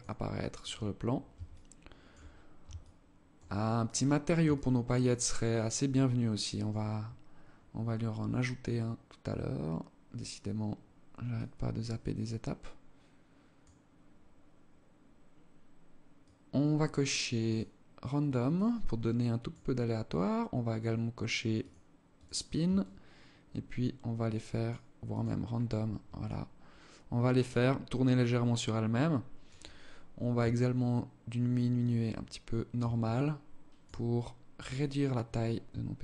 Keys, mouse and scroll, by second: 0.3-0.7 scroll up 3, 1.0 alt+shift+click, 2.3 alt+shift+click, 3.2-3.6 scroll down 2, 4.0 alt+shift+click, 6.5 scroll up 1, 6.7-7.3 scroll down 2, 7.9 scroll up 2, 9.2-9.8 scroll up 5, 10.8 click, 15.7 click, 17.0 click, 18.1 click, 21.1 click, 21.6 click, 22.3 shift+click, 24.6 click, 25.2 scroll up 3, 25.7 alt+click, 30.0 shift+click, 32.5 alt+click, 33.5 scroll down 4, 34.1 scroll up 1, 34.3 scroll down 1, 35.6 shift+click.